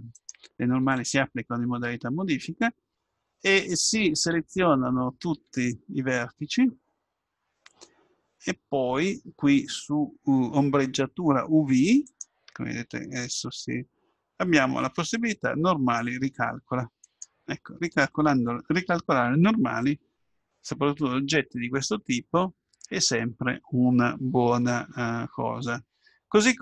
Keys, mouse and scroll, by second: 0.2-2.2 right drag, 0.9 Tab, 4.4 a, 5.3 a, 12.7-14.1 drag, 17.0-19.0 drag, 26.1 Tab.